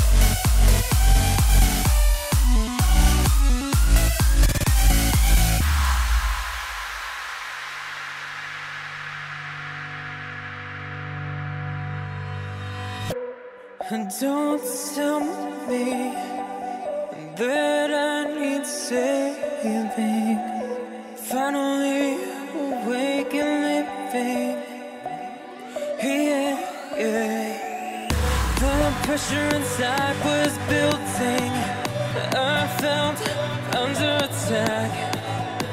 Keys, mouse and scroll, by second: 3.3 scroll up 1, 4.2-5.1 middle drag, 5.1-5.6 scroll up 3, 5.6-6.2 middle drag, 6.2 ctrl+alt+KP_0, 6.6-7.2 scroll down 2, 7.9 click, 10.6-11.1 scroll up 6, 11.1-11.6 shift+middle drag, 11.6 click, 12.6 click, 21.3 click, 21.7-23.0 scroll up 1, 24.1 KP_0, 24.8 click, 28.0-29.0 scroll down 6, 29.0-29.5 scroll up 6, 29.5-31.1 middle drag, 31.1 KP_0, 32.1 click, 34.1 click.